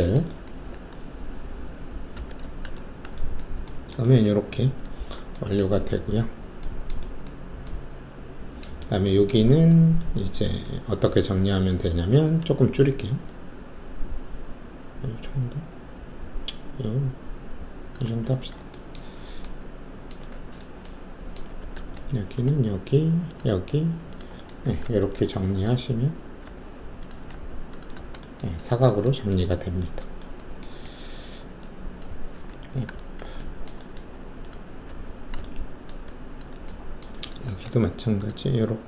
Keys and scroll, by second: 2.1 shift+b, 21.7 alt+s, 24.6 w, 25.0 alt+2, 26.4 alt+q, 27.3 alt+q, 32.3 alt+f, 34.8 alt+f, 37.5 alt+s.